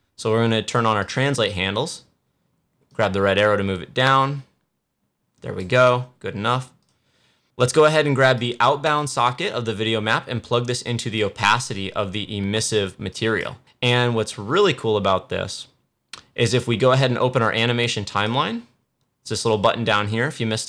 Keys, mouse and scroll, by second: 0.9-13.0 drag, 18.0 click, 18.1 click.